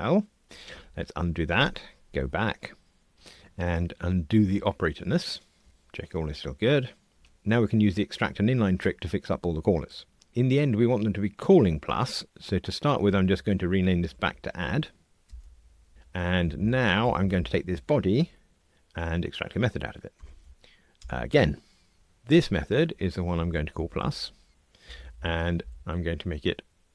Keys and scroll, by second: 0.8 super+z, 4.3 super+z, 13.1 shift+F6, 20.1 alt+super+m, 21.0 Return, 22.3 shift+F6, 25.8 alt+Return.